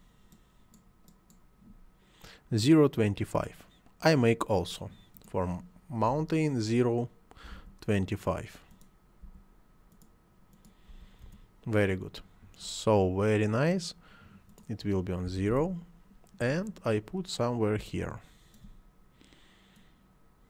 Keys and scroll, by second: 6.1 ., 7.5 2, 7.8 5, 9.2 5, 10.9 5, 11.2 Return, 15.3 0, 15.5 Return.